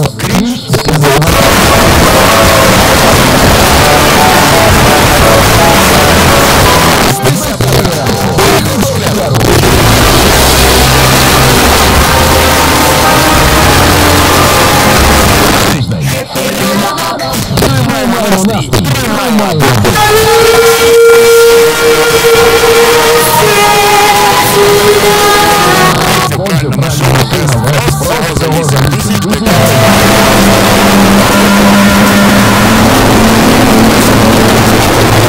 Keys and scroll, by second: 6.9 Page_Down, 15.5 Page_Down, 25.9 Page_Down.